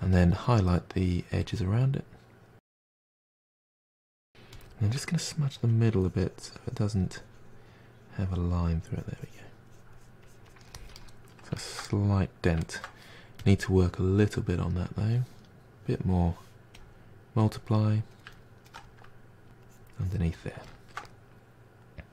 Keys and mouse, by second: 5.0 f, 6.0-11.0 drag, 11.0-13.4 middle drag, 13.4-17.9 drag, 17.9-19.7 middle drag, 19.7 f, 21.1-22.1 drag.